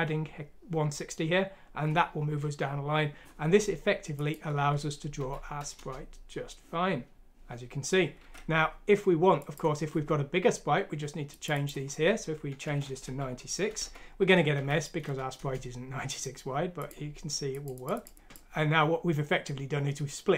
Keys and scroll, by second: 5.2 F6, 5.8 Return, 8.4 alt+Tab, 12.8-13.8 typing, 14.6 F6, 15.4 Return, 18.1 alt+Tab.